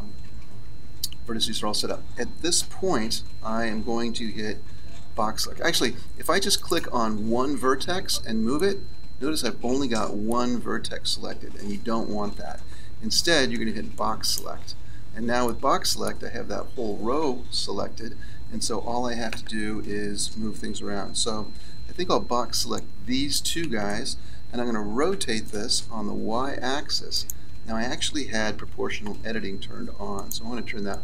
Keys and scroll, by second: 11.4 KP_1, 13.5 b, 17.7 KP_1, 21.9 b, 28.4 ctrl+z.